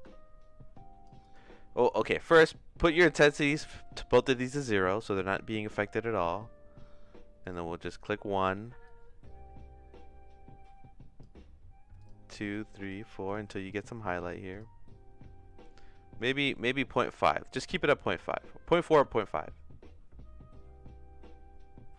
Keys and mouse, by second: 0.0-1.1 shift+drag, 1.2 click, 3.0 click, 3.6 click, 5.3 middle click, 7.4 click, 8.9-11.2 shift+drag, 12.0 click, 13.3 click, 13.7 click, 14.5 click, 16.3 click, 17.3 click, 17.5 click, 17.7 click, 19.2-21.9 shift+drag.